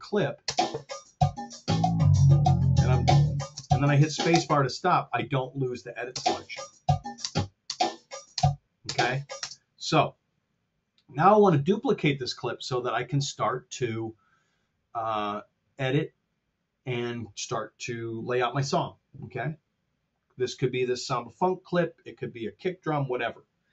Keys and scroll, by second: 0.4 space, 4.3 space, 6.1 space, 7.2 space, 9.8 space.